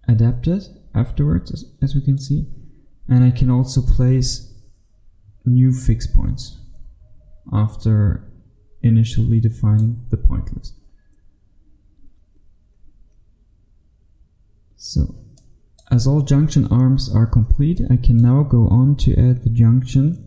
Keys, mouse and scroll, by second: 0.5 click, 4.0-5.6 scroll up 1, 5.6 scroll up 1, 5.8 click, 10.3-10.8 scroll down 1, 15.4 click, 16.0-17.8 scroll down 1, 17.8 click.